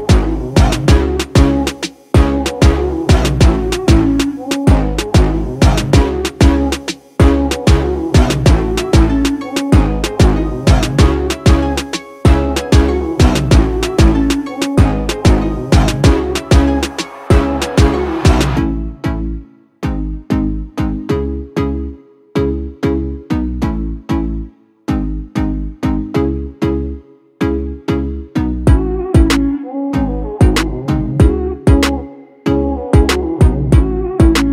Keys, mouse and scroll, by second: 5.6-6.6 click, 10.3-17.0 drag.